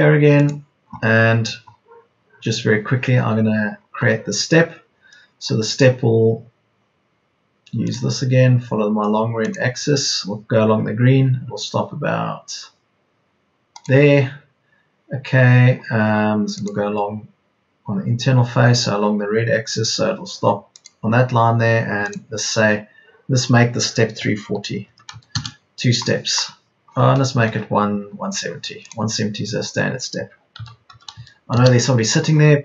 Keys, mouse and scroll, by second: 24.4 KP_3, 24.8 KP_4, 25.1 KP_0, 30.3 ctrl+z, 30.5 KP_1, 30.8 KP_7, 31.1 KP_0.